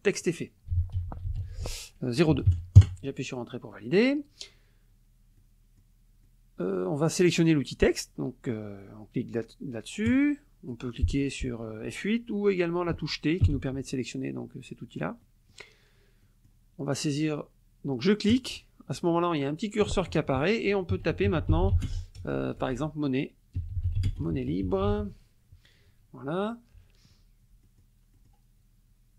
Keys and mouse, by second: 0.5-2.5 typing, 2.8 KP_Enter, 3.7 click, 5.4 click, 6.2 click, 10.1 click, 13.4 t, 15.2 click, 16.2 click, 18.3 click, 20.7-22.2 typing, 23.3-25.3 typing, 27.6 click, 28.1 middle click.